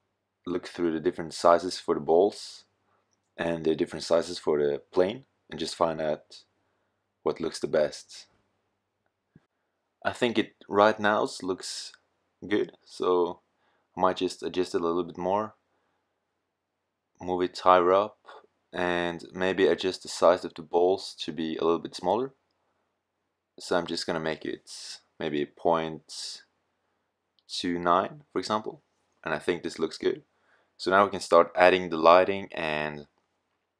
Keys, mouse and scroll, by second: 5.9 s, 7.6 click, 13.0 s, 14.6 g, 15.5 click, 15.9-17.7 drag, 18.8 middle click, 24.0 middle click, 26.0-27.5 middle drag, 29.1-30.1 middle drag, 33.6-33.7 drag.